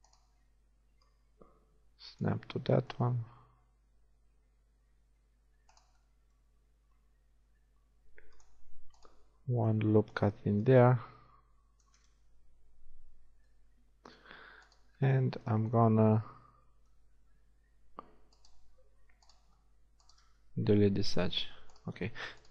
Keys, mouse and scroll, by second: 1.1-2.5 drag, 2.5 middle click, 3.2 ctrl+r, 6.8 ctrl+r, 10.6-11.8 drag, 13.2 a, 20.4 shift+x.